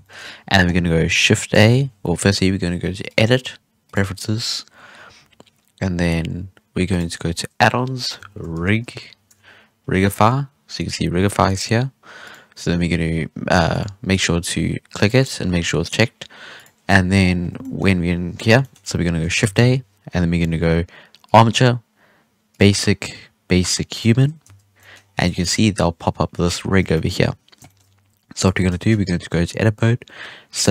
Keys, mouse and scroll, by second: 1.5 shift+a, 3.0-6.1 drag, 16.8-17.1 scroll down 1, 17.1 scroll up 3, 17.4-18.0 scroll down 4, 17.5 shift+middle drag, 18.0-18.5 scroll up 2, 18.5-19.4 shift+middle drag, 19.4 shift+a, 24.2 scroll down 1, 24.4 z, 24.7 shift+middle drag, 24.9-25.3 scroll up 4, 25.3-25.6 shift+middle drag, 25.9-26.9 scroll down 4, 26.9 shift+middle drag, 27.1-27.6 scroll up 4, 27.6-28.1 shift+middle drag, 28.1 scroll up 2, 28.4 Tab, 28.7-29.2 shift+middle drag, 29.2-29.6 scroll down 1, 29.6-30.5 scroll up 2, 30.5 right click.